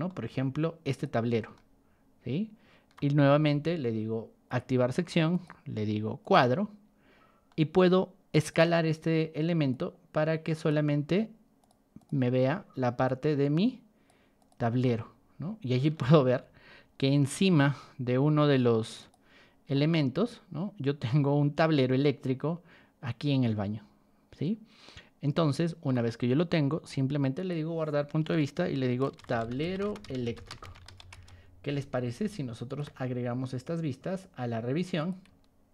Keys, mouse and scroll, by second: 0.2 middle click, 0.8 click, 1.5-2.9 shift+middle drag, 4.4 click, 5.3 click, 6.2 click, 6.8 middle click, 7.4 middle click, 8.3 click, 9.7-10.6 drag, 11.6 click, 11.9 click, 13.0-14.0 drag, 14.3 click, 14.8-15.9 shift+middle drag, 16.1-16.5 scroll up 4, 18.9 click, 19.7-25.8 shift+middle drag, 26.0 middle click, 27.3 click, 29.1-30.9 typing, 32.6 shift+click, 33.6-34.1 drag, 34.9 click.